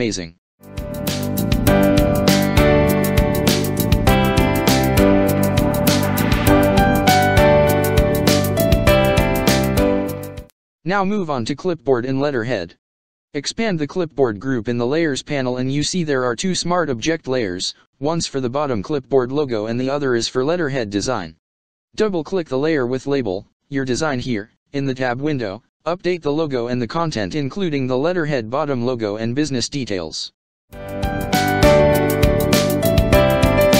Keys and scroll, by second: 1.7 ctrl+-, 5.7 space, 11.4 ctrl+space, 11.9 ctrl+space, 13.2 ctrl+space, 13.6 ctrl+space, 23.1 ctrl+space, 23.6 ctrl+space, 25.5 ctrl+space, 26.0 ctrl+space, 27.4 ctrl+space, 27.7 ctrl+space.